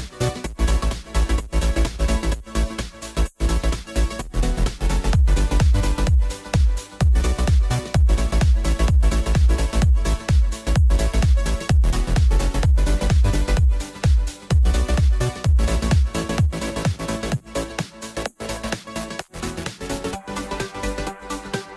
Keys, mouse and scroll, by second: 2.7 click, 3.8 Tab, 4.7 x, 5.4-7.3 scroll down 3, 7.3-8.0 scroll up 4, 8.0 shift+a, 10.4 click, 11.0-12.8 drag, 12.8 BackSpace, 14.7 Tab, 15.2 Tab, 15.6 click, 17.9 click, 18.3-19.0 middle drag, 19.0 click, 20.0 KP_0, 21.4 click.